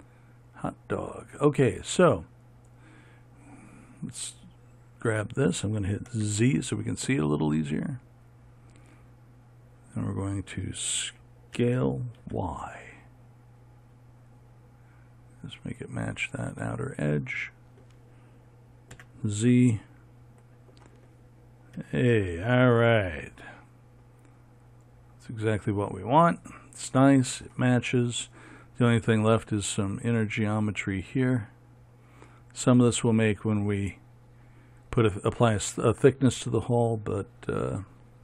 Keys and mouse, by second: 3.0-6.7 right drag, 6.7 z, 10.2-12.2 middle drag, 12.2 s, 15.7-19.5 middle drag, 19.5 z, 22.4 a, 23.7-38.2 middle drag.